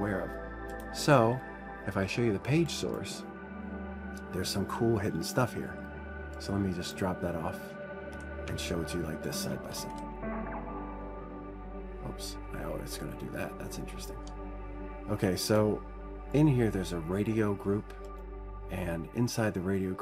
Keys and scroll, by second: 8.8 super+Right, 10.6 super+Right.